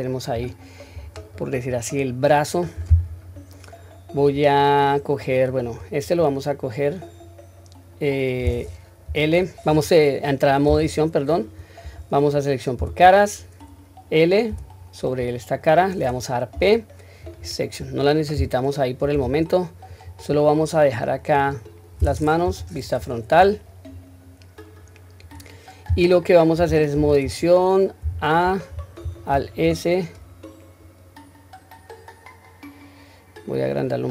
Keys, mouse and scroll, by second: 0.3 scroll down 1, 0.9-1.5 scroll down 1, 1.5 click, 1.5 scroll up 1, 4.2 scroll down 1, 4.7-5.2 middle drag, 5.5 click, 6.0 click, 9.1 l, 10.7 Tab, 12.8 3, 19.2 Tab, 19.9 click, 21.2 click, 22.4 KP_1, 23.0 scroll up 1, 23.9 scroll down 1, 26.9 Tab, 28.0 a, 29.3 alt+s.